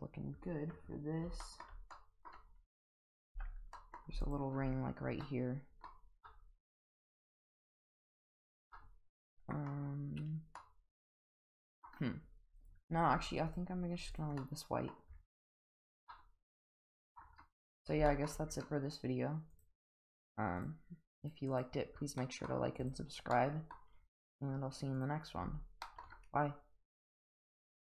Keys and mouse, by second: 1.4 shift+middle drag, 1.9-2.3 middle drag, 3.3 Tab, 3.7 middle click, 4.2 alt+click, 5.2 middle click, 6.2 middle click, 8.7 middle click, 10.6-11.8 middle drag, 12.6 click, 13.0 Tab, 13.5 click, 14.1 click, 14.4-14.9 middle drag, 15.5 click, 16.1-17.2 middle drag, 18.1 shift+middle drag, 19.5 click, 19.8 click, 20.6 click, 21.2 click, 21.5 click, 22.2 middle drag, 23.3-23.7 middle drag, 24.3 click, 24.9 click, 25.8 shift+middle drag.